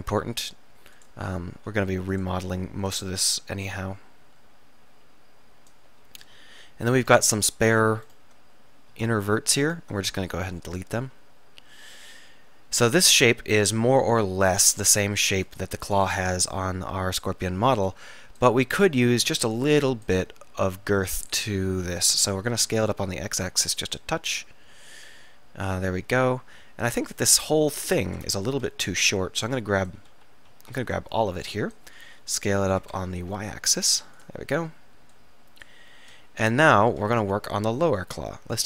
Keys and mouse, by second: 0.2 r, 1.6 s, 7.1-11.7 drag, 10.2 x, 11.9-14.2 middle drag, 16.8-19.5 middle drag, 22.0 middle click, 22.4 s, 24.7 click, 27.4 KP_1, 27.9 KP_3, 28.8 a, 28.8 b, 30.3 a, 30.6 z, 31.0 b, 32.2 s, 36.2 z.